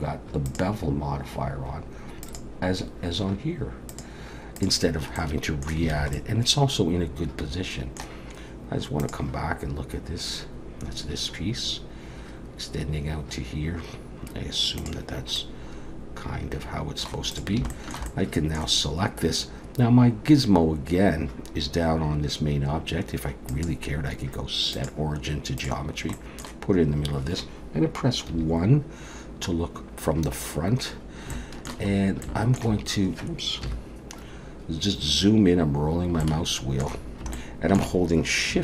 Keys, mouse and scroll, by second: 0.5 click, 2.2 click, 3.9 click, 4.6 click, 5.2 middle click, 5.9 alt+a, 6.1 middle click, 15.4 middle click, 17.3 click, 17.7 shift+middle click, 18.1 middle click, 19.4-20.4 scroll down 1, 23.5 click, 26.1 middle click, 28.3 KP_1, 30.3-31.3 scroll up 3, 31.3 shift+middle click, 32.0 scroll up 1, 32.3 middle click, 33.6 KP_1, 34.2 scroll up 1, 35.2-35.8 scroll down 3, 35.8-36.2 scroll up 3, 36.2 shift+middle click, 37.3 shift+middle click.